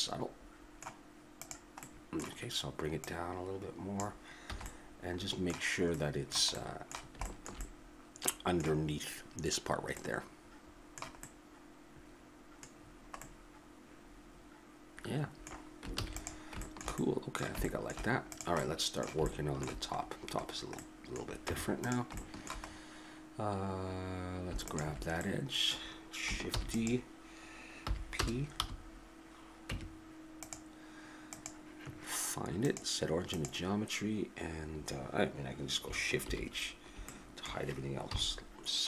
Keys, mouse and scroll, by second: 1.4-4.0 drag, 4.5 a, 4.7 click, 4.7 middle click, 9.6 middle click, 12.7-16.0 middle drag, 16.0 ctrl+s, 18.3-19.5 right drag, 19.5 middle click, 21.4 Tab, 25.2-26.6 middle drag, 26.6 shift+d, 27.9 p, 28.6 1, 29.7 Tab, 36.2 shift+h, 38.0 KP_7.